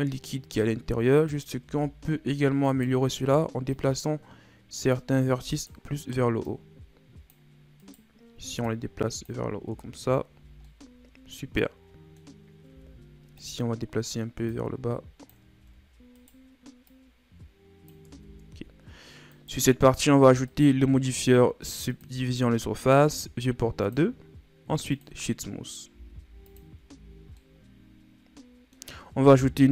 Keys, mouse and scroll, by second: 0.5-1.2 scroll up 1, 1.2 right click, 1.6 Tab, 2.6 right click, 3.7-5.5 drag, 5.5 right click, 6.4-7.8 drag, 7.8 right click, 8.6-9.6 drag, 9.6 Tab, 10.0 scroll down 2, 10.3 a, 10.6-12.3 middle drag, 12.3-12.6 scroll up 1, 12.6 Tab, 13.3 right click, 14.4-15.5 drag, 15.5 ctrl+z, 16.1 right click, 16.8-18.0 drag, 18.0 Tab, 18.3 scroll down 2, 19.3 right click, 20.4-23.5 drag, 23.8-25.9 drag, 25.9 w, 26.8 a, 27.1 scroll down 2, 27.3-29.6 middle drag, 29.6 KP_1.